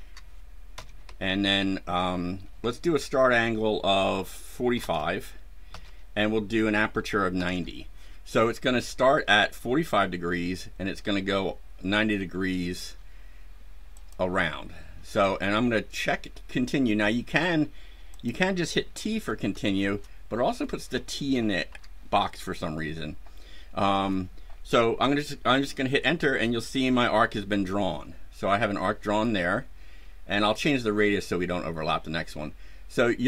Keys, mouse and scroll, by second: 0.7 KP_5, 1.0 KP_Enter, 4.7 KP_4, 5.6 KP_Enter, 7.3 KP_9, 7.4 KP_0, 13.9 click, 18.1 click, 19.5 shift+t, 21.6 BackSpace, 26.0 Return.